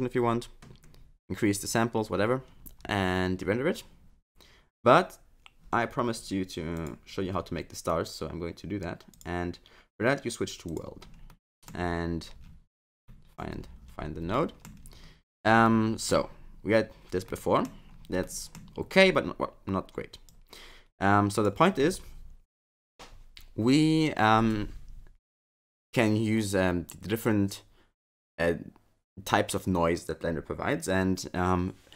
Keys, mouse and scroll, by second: 6.1 click, 6.7 click, 9.1 click, 11.2 scroll up 1, 11.4 middle click, 11.8-13.0 scroll down 15, 13.0 middle click, 13.5-14.1 scroll up 11, 14.3 middle click, 14.8-15.6 scroll up 6, 15.6 middle click, 17.3 middle click, 17.3-18.1 scroll up 1, 18.2 middle click, 20.3 click.